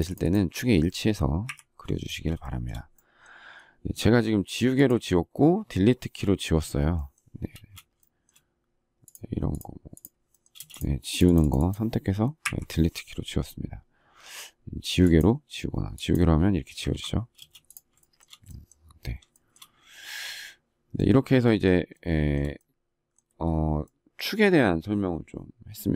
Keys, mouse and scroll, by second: 0.0 shift+click, 0.1 shift+double click, 0.2 shift+click, 1.4 Delete, 2.4 shift+middle click, 7.5 space, 10.5 space, 12.4 Delete, 16.8 ctrl+z, 18.1 shift+middle click, 19.3 shift+middle click, 21.9 shift+middle click.